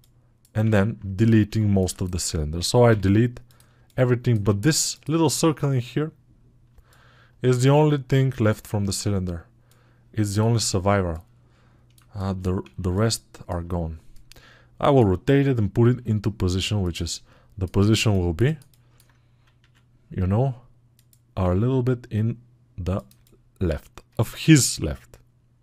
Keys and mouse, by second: 6.5-11.8 alt+middle drag, 11.8 alt+shift+click, 12.2-16.8 alt+right drag, 16.8-25.6 alt+middle drag.